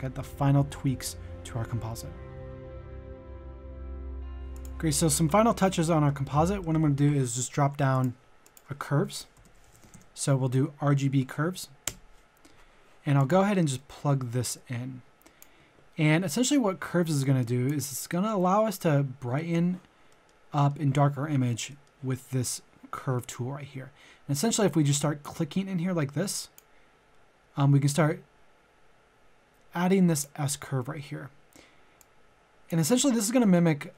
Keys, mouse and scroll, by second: 5.8 middle click, 8.0 click, 9.1-9.9 typing, 11.9 Return, 13.2 click, 13.7 middle click, 14.5-15.8 drag, 16.1 middle click, 17.2 click, 18.0 middle click, 18.6 scroll up 1, 19.3 middle click, 25.2-30.7 drag.